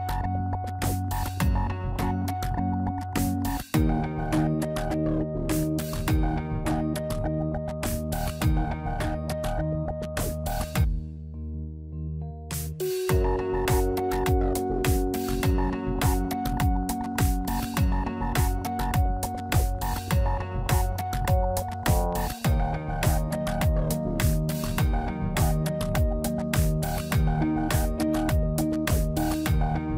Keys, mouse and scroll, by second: 1.0 click, 2.5 x, 5.5 click, 5.9 middle click, 7.5 ctrl+z, 9.0 middle click, 16.4 KP_1, 16.7 scroll up 4, 18.2 click, 21.1 middle click, 21.9 scroll down 1, 22.8 scroll down 3, 24.2 click, 24.8 click, 27.2 middle click, 28.4 click, 29.4 x.